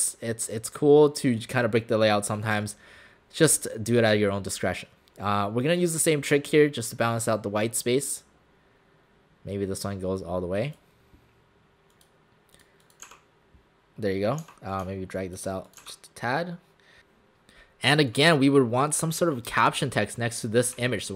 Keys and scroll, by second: 19.4 space.